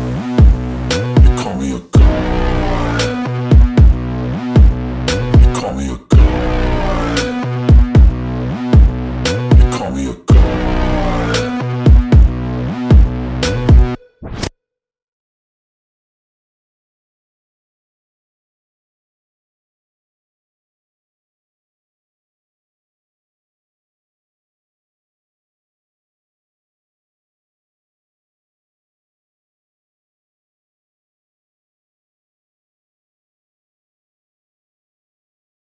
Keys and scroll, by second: 2.8 Return, 13.3 b, 14.3-17.5 typing, 18.1 Return, 28.0 1, 28.2 Return, 33.0 5, 33.3 0, 33.6 Return, 35.4 6.